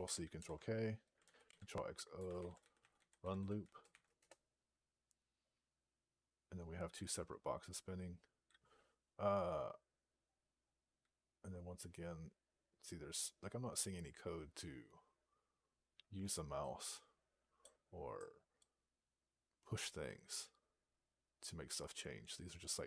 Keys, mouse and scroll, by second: 0.2 ctrl+k, 1.9-3.8 typing, 4.0 Return, 9.7 scroll down 1, 10.5-10.9 scroll down 8, 11.6 scroll down 10, 12.8-14.2 scroll up 19, 14.6 scroll up 2, 15.8 scroll up 38, 19.2-20.8 scroll up 55, 20.8-21.5 scroll up 10.